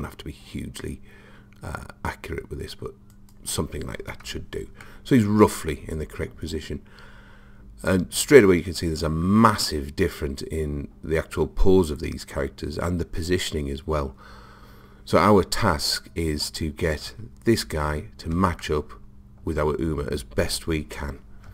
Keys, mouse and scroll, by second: 3.4 click, 5.0-6.8 middle drag, 18.6-20.5 middle drag.